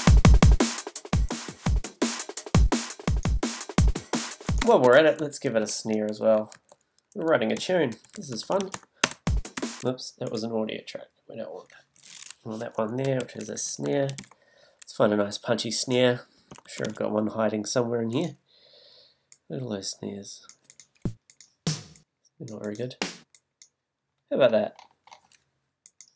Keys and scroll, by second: 4.6 space, 6.4 super+t, 9.8 space, 11.7 BackSpace, 13.2 alt+super+r, 13.5 shift+super+s, 13.8 shift+n, 14.2 Return, 16.3 s.